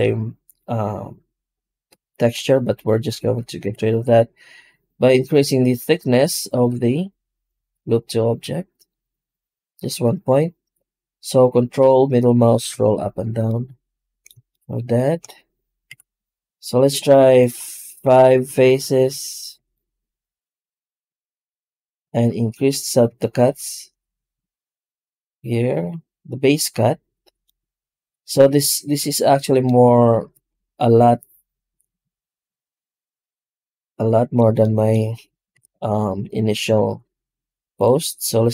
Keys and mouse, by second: 3.5 F9, 15.1-15.7 middle drag, 15.7 F9, 35.4 F9.